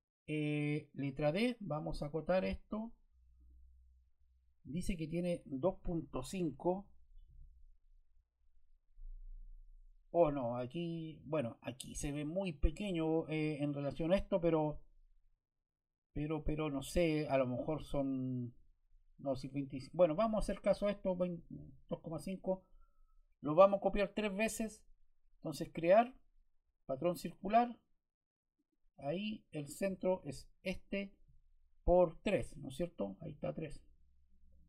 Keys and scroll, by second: 1.0 d, 6.1 2, 7.1 5, 9.2 Return.